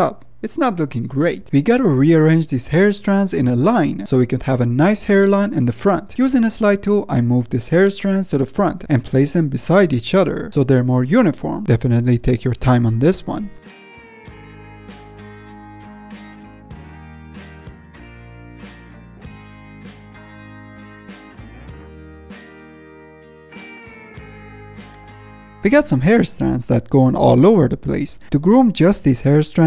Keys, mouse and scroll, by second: 0.3 z, 0.4 scroll up 4, 0.7-1.7 shift+middle drag, 1.7 F10, 1.9-2.9 middle drag, 2.9-4.3 drag, 4.3 f, 4.7-5.0 middle drag, 5.0-6.9 drag, 6.9-7.6 middle drag, 7.6-8.6 drag, 8.6 ctrl+z, 8.7-9.0 middle drag, 9.0-10.9 drag, 10.9-11.3 middle drag, 11.3 f, 11.6 middle drag, 11.9-13.2 drag, 13.2-14.1 middle drag, 14.1 f, 14.6-15.5 drag, 15.5-16.1 middle drag, 16.1-17.7 drag, 17.7-18.7 middle drag, 18.7 click, 19.3-19.9 middle drag, 19.9-20.2 drag, 20.2-20.8 middle drag, 20.8 drag, 21.0 middle click, 21.6-23.3 drag, 23.3-24.1 middle drag, 24.1-24.5 drag, 24.5-24.8 middle drag, 24.8 ctrl+z, 25.1-25.4 drag, 25.4 middle click, 26.1 ctrl+Tab, 28.0 ctrl+s, 29.3 F10.